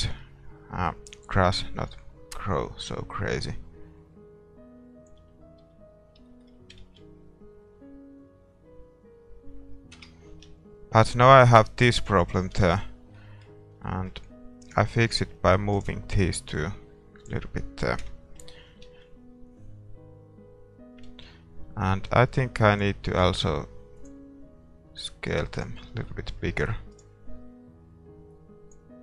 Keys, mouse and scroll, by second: 5.6 a, 5.9-8.6 middle drag, 7.0 shift+z, 10.0 KP_0, 10.5 KP_0, 12.8 shift+z, 12.9-14.6 middle drag, 14.6 a, 14.7-18.0 right drag, 16.6-18.4 drag, 18.0 KP_0, 18.4 middle click, 19.1 shift+z, 21.1 middle click, 21.2 shift+z, 22.3 a, 22.7-26.0 right drag, 26.0 click, 26.0-29.0 middle drag, 27.0-29.0 right drag.